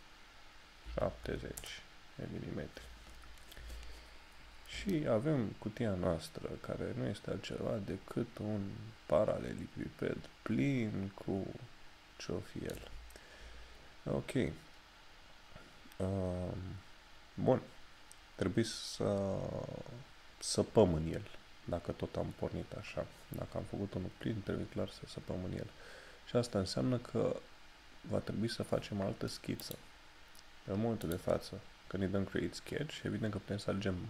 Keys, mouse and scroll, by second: 4.8 shift+Num_Lock, 5.0 shift+middle click, 15.8 scroll up 1, 29.7 click.